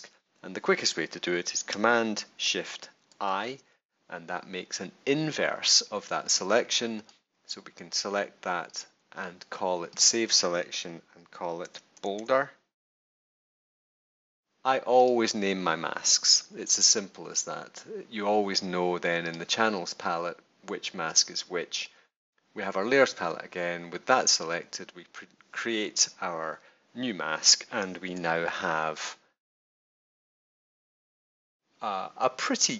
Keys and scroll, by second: 3.1 shift+super+i, 11.4-13.8 typing, 28.1 super+=, 30.7 space.